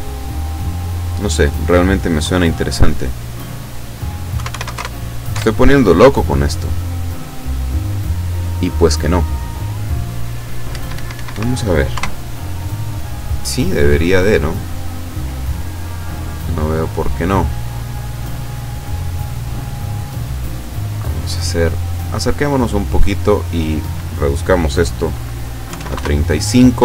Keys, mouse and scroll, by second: 1.1 click, 4.4 KP_2, 4.5 KP_5, 4.7 KP_0, 4.8 KP_Enter, 5.3 F12, 10.7 Escape, 19.3-19.6 scroll down 2, 19.7 middle click, 20.5 scroll down 2, 21.4-23.3 drag, 23.8 click, 25.7 KP_3, 25.8 KP_5, 25.9 KP_Enter.